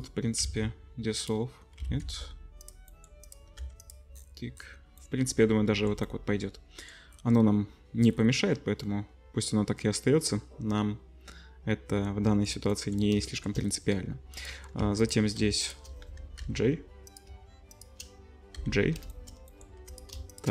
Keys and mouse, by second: 0.4 x, 1.8 ctrl+z, 2.6 click, 3.0 click, 3.4 middle click, 3.6 2, 3.8 click, 3.9-6.8 middle drag, 6.8 click, 7.1-8.2 middle drag, 8.2 click, 8.8 middle click, 9.2 middle click, 9.6 middle click, 10.6-12.8 middle drag, 12.8 click, 12.8-14.3 middle drag, 14.3 click, 14.4 middle click, 14.8 1, 15.0 click, 15.1 middle click, 15.6 shift+click, 16.4 j, 18.6 j, 19.8 2, 19.9 click, 20.3 shift+click.